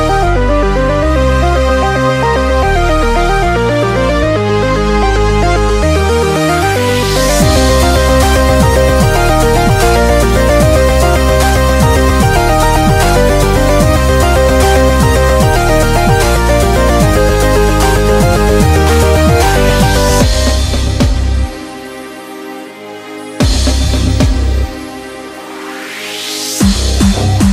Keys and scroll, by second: 5.6 super+d, 7.4 super+-, 7.5 super+-, 7.7 super+-, 7.9 super+-, 9.7 super+-, 9.8 super+-, 10.2-12.0 typing, 12.2 super+=, 21.2 typing, 22.6-23.6 typing.